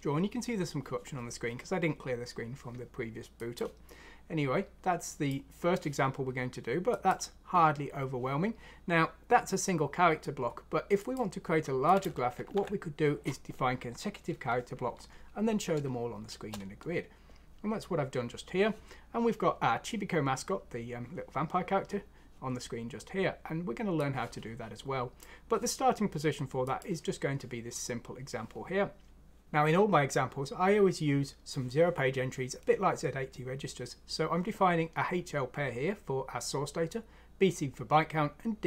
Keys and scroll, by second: 12.5 F6, 16.2 Return.